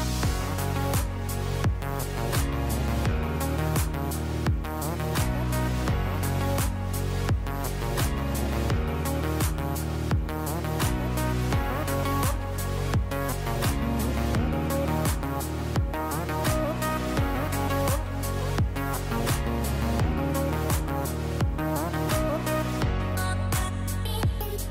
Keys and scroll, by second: 21.3 Page_Down.